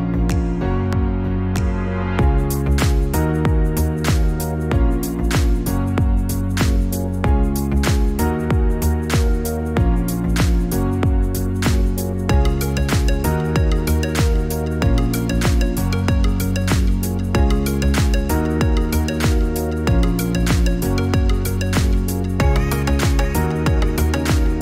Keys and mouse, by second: 5.7-9.1 drag.